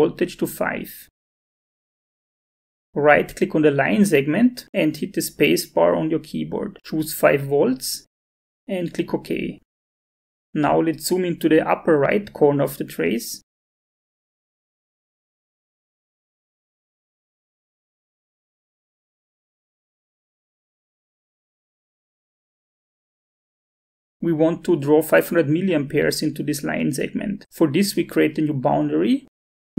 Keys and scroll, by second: 0.7 shift+v, 6.2 space.